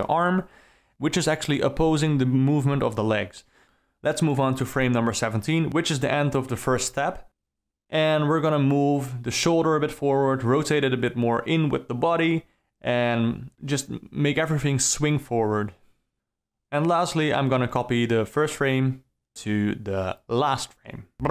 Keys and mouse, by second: 1.5-1.8 alt+middle drag, 2.2 ctrl+middle drag, 2.6 middle click, 2.8 alt+middle click, 3.5 click, 3.6 a, 3.6 i, 3.9 alt+middle click, 4.3 alt+middle click, 4.7 click, 5.8 alt+middle click, 6.3 middle click, 6.5 click, 6.9 alt+r, 7.0 alt+g, 7.1 middle click, 7.9 click, 8.1 r, 8.7 alt+r, 9.7 middle click, 9.9-10.3 alt+middle drag, 10.4 r, 10.9-11.3 alt+middle drag, 11.7-12.6 alt+middle drag, 15.0 r, 15.5 r, 16.2 r, 16.9-17.2 alt+middle drag, 17.5 a, 17.7 i, 18.1 alt+a, 18.4 click, 18.8 shift+d, 19.4 KP_0, 19.7 middle click, 20.0 shift+Left, 20.1 d, 20.2 space.